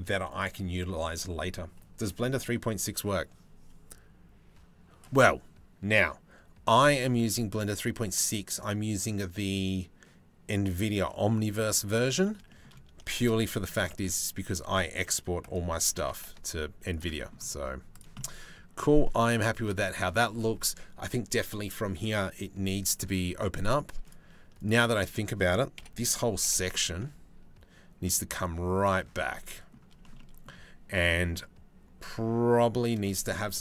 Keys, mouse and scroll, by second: 12.8 shift+d, 15.4 g, 16.7 middle click, 17.8 middle click, 18.7 shift+middle click, 19.0 middle click, 23.2 click, 24.5 shift+middle click, 25.4 KP_7, 25.9 g, 28.9 middle click, 29.8 middle click, 30.7 middle click.